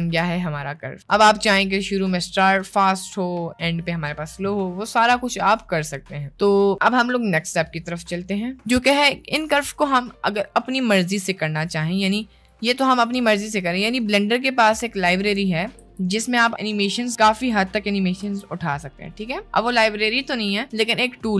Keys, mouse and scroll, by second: 0.7 middle click, 2.5 middle click, 3.3 middle click, 9.2 middle click, 11.2 click, 12.0 click, 14.3 ctrl+click, 15.7 a, 16.0 x, 18.2 ctrl+z.